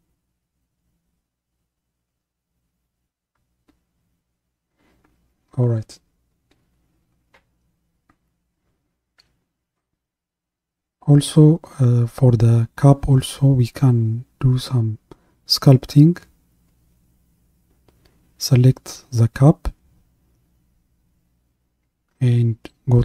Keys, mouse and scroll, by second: 4.5-8.8 middle drag, 19.1 click.